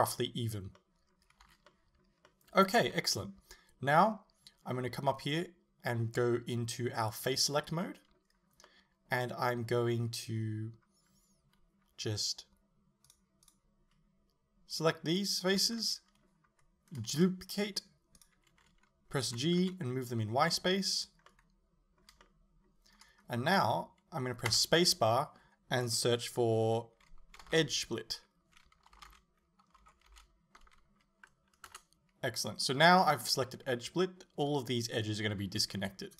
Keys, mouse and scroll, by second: 1.5 a, 7.1 click, 7.9-13.1 middle drag, 13.1 shift+right click, 13.5 shift+right click, 14.8 right click, 15.2 shift+right click, 15.8-19.3 middle drag, 17.2 shift+d, 19.3 g, 21.1 click, 21.3-31.8 middle drag, 24.5 space, 31.8 Return, 33.0 scroll up 1, 33.4 middle click.